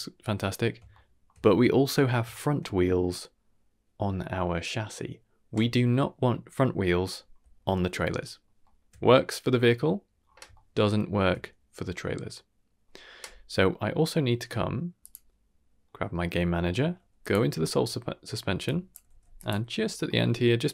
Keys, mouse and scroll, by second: 0.9-1.2 shift+middle drag, 1.3 middle drag, 1.9-3.1 scroll up 5, 2.3 shift+middle drag, 7.1-7.6 scroll down 1, 7.8 shift+middle drag, 7.8 scroll down 3, 8.2 shift+middle drag, 8.6 shift+middle drag, 8.9 scroll up 2, 10.2 scroll down 1, 10.3 scroll down 1, 10.5 shift+middle drag, 10.9 shift+middle drag, 13.4 scroll up 2, 13.7 middle click, 15.0 click, 15.8 middle click, 16.3 middle click, 16.7 middle click, 17.2 click, 17.4 Tab, 17.9 middle click, 18.6-18.9 drag, 19.0 g, 19.7-20.0 scroll up 2, 20.0 middle click.